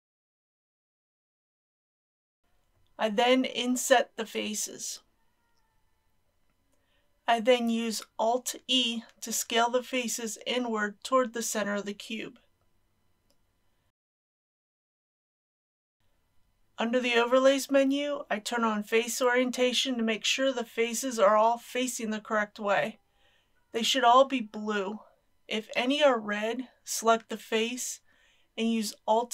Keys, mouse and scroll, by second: 2.3 KP_Decimal, 2.6 KP_1, 6.0 scroll up 1, 6.8 shift+middle click, 8.1 alt+e, 8.8 click, 12.0 click, 13.7 KP_Decimal, 13.8 KP_0, 14.2 KP_5, 15.3 click, 17.7 a, 19.0-20.1 drag, 22.3-26.1 middle drag, 26.9-29.1 drag.